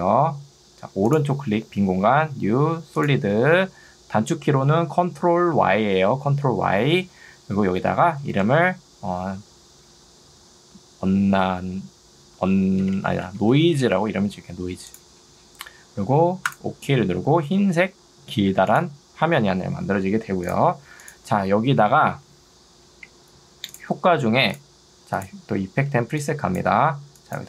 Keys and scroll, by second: 8.1 d, 8.5 BackSpace, 12.5-14.6 typing, 25.9 ctrl+2, 26.9 Escape.